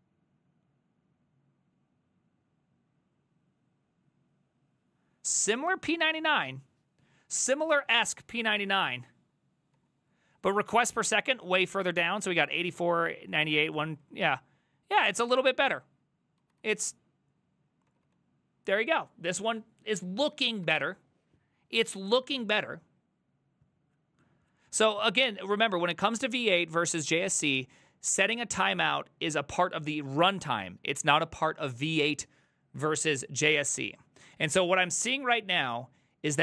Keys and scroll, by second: 7.6 ctrl+a, 7.8 [, 8.0 ctrl+u, 8.4 ctrl+u, 8.6 ctrl+u, 9.8 ctrl+d, 13.3 ctrl+d, 14.1 ctrl+d, 16.4 ctrl+u, 16.6 ctrl+u, 17.9 ctrl+d, 18.1 ctrl+d, 20.7 alt++.